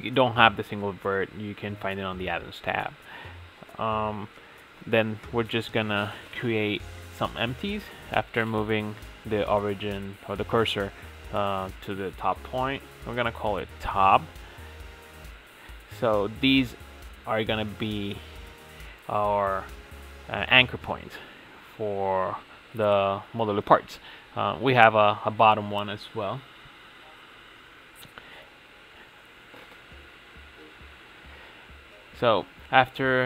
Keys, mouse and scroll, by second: 0.0 shift+s, 11.3 click, 11.7-14.1 drag, 14.2 click, 14.9 Tab, 15.4-16.4 drag, 16.4 shift+s, 18.4 Tab, 18.6 shift+a, 21.4-25.3 drag, 25.3 shift+f, 27.6 BackSpace, 28.4 Tab, 28.5 ctrl+e, 29.2 a, 29.8 ctrl+e, 31.8-33.2 drag.